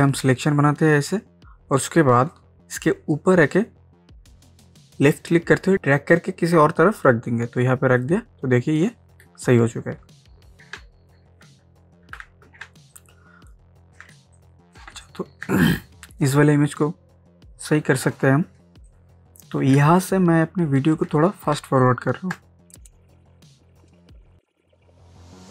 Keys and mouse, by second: 10.8 ctrl+space, 12.3 ctrl+d, 12.7 ctrl+space, 12.9 ctrl+click, 13.2 ctrl+space, 14.2 space, 14.4 click, 14.7 space, 15.0 ctrl+click, 15.4 ctrl+space, 15.8 click, 16.4 space, 18.6 space, 18.9 click, 19.1 space, 19.8 ctrl+space, 20.0 ctrl+click, 20.3 ctrl+space, 21.6 space, 21.9 click, 22.1 space, 22.7 ctrl+space, 22.8-25.5 ctrl+drag.